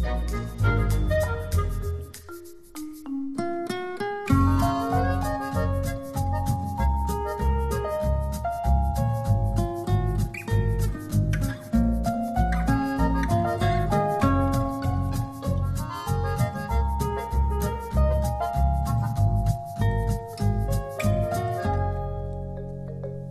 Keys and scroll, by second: 5.8 space, 8.1 alt+space, 8.6 space.